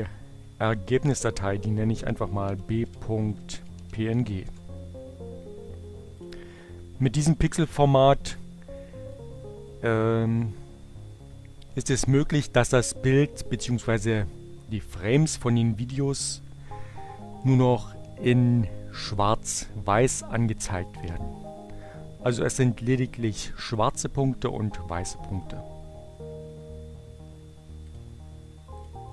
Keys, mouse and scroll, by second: 0.6 b, 2.1-3.7 typing, 6.3 click, 6.9 click, 9.0 click, 26.7 click, 28.4 click.